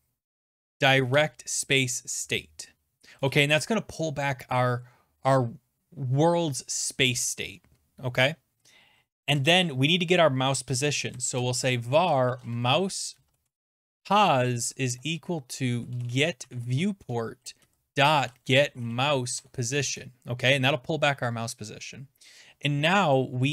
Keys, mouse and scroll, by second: 0.0-1.2 typing, 3.2 Return, 9.3 Return, 10.9-19.9 typing, 22.7-23.5 typing, 23.2 click.